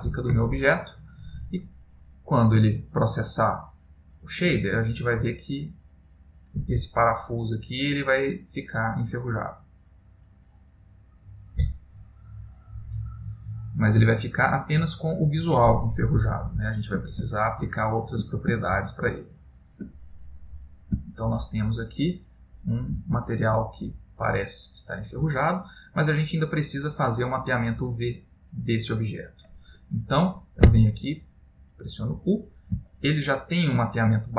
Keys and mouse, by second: 16.5 shift+middle click, 17.4 middle click, 18.7 ctrl+middle click, 20.2 middle click, 21.2 ctrl+middle click, 23.2 ctrl+middle click, 23.7 middle click, 31.6 Tab, 33.2 ctrl+middle click, 33.9 ctrl+middle click.